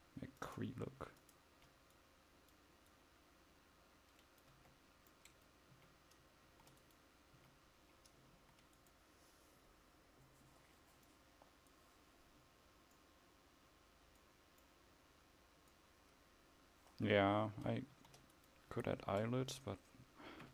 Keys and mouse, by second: 2.5-5.8 drag, 2.5-4.7 right drag, 4.7 Tab, 5.8 a, 6.5 ctrl+s, 7.4 a, 8.4 ctrl+s, 18.1 ctrl+s, 19.1 KP_0.